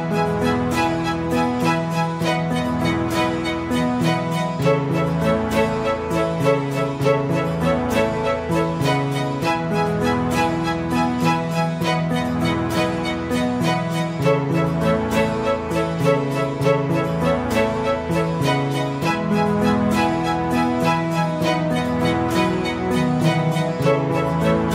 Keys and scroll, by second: 0.1 space, 4.9 space, 10.3 space, 12.4 space, 19.1 space.